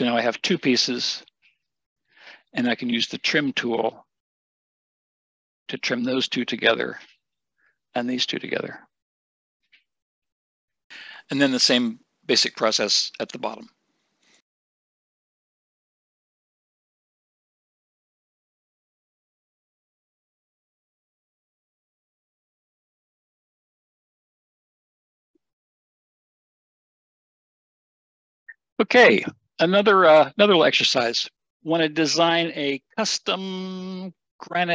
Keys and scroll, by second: 20.1 Escape.